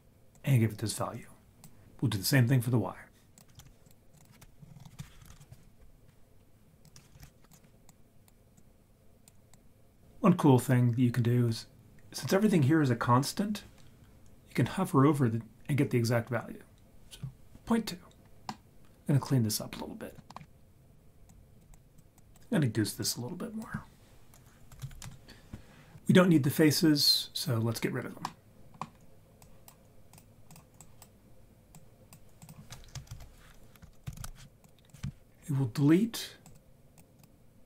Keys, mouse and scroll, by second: 0.3-1.7 drag, 3.4 click, 3.7 shift+d, 4.1-5.3 drag, 4.6 Right, 4.7 Right, 4.8 Right, 6.8 click, 7.2 shift+d, 7.5 click, 8.2 click, 8.5 click, 9.5-10.0 drag, 18.5-20.2 middle drag, 20.3 middle click, 20.4 scroll down 2, 20.5-21.0 scroll up 2, 21.2 click, 21.7 click, 22.2 click, 23.0-25.0 drag, 28.2 middle click, 29.4 click, 30.1-31.0 drag, 31.7 click, 32.4 click, 33.1 shift+a, 34.3 e, 35.3 scroll up 3, 36.5-36.9 drag, 37.2-37.6 drag.